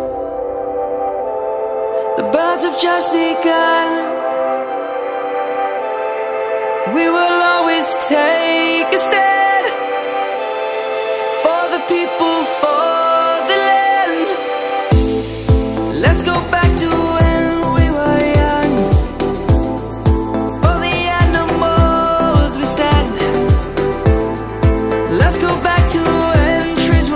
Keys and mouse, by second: 1.6 Tab, 3.1 click, 4.9 ctrl++, 5.1 ctrl++, 5.3 ctrl++, 6.1 ctrl++, 8.0 middle click, 11.9 middle click, 12.4 Tab, 12.9 middle click, 22.4 7, 23.9 middle click, 25.5 middle click, 26.6 7.